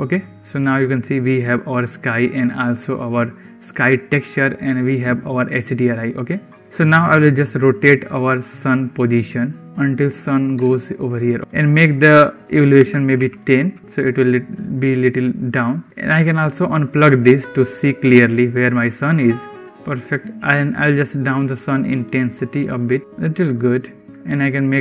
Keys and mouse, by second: 7.1 click, 8.3 click, 9.4 click, 11.4-13.3 drag, 15.4 click, 16.1 click, 16.3 click, 18.2 click, 20.7-23.3 drag, 24.3 click.